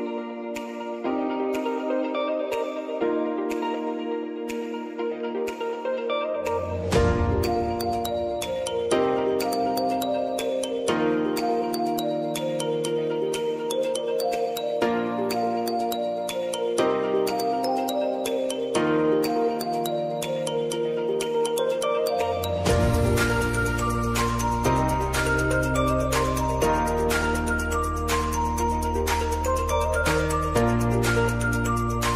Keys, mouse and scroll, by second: 3.9 Return, 5.7 click, 10.6 ctrl+i, 12.0 click, 12.5 Return, 13.9-15.3 drag, 15.3 s, 16.2-22.4 drag, 22.6 click, 26.3 right click, 27.4 click.